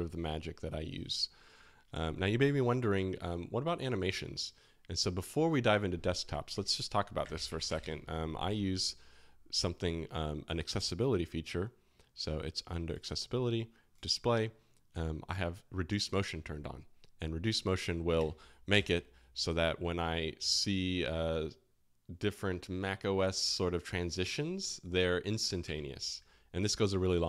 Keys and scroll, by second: 3.0 typing, 6.5 super+space, 6.9-8.3 typing, 17.9-19.1 typing, 25.8 space.